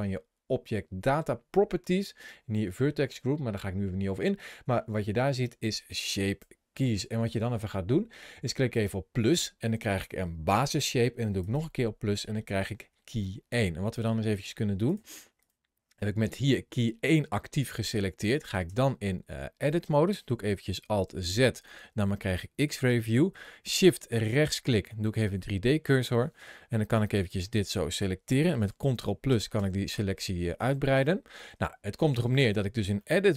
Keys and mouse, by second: 8.5 click, 11.2 click, 13.0 middle click, 14.6 click, 15.2 click, 18.5 Tab, 20.9 alt+z, 21.6-23.0 middle drag, 24.1 shift+click, 24.9 middle click, 26.9 click, 28.8 ctrl+KP_Add, 29.1 ctrl+KP_Add, 29.4 ctrl+KP_Add, 29.7 ctrl+KP_Add, 33.0-33.3 middle drag.